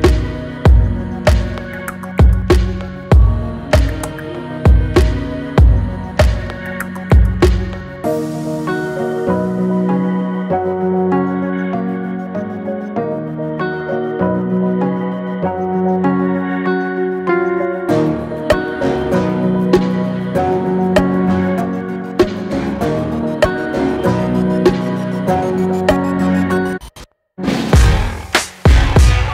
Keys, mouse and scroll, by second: 0.8 scroll down 2, 1.1-1.4 middle drag, 1.4-1.8 scroll down 3, 1.8-2.4 middle drag, 2.4-2.7 scroll up 6, 2.7 middle click, 3.1 scroll down 4, 3.4-4.0 shift+middle drag, 4.0 shift+a, 6.2-6.7 shift+middle drag, 7.7 r, 12.1 s, 13.5 g, 16.5 s, 20.6-22.5 middle drag, 22.7 drag, 22.9-24.3 middle drag, 24.3 shift+a.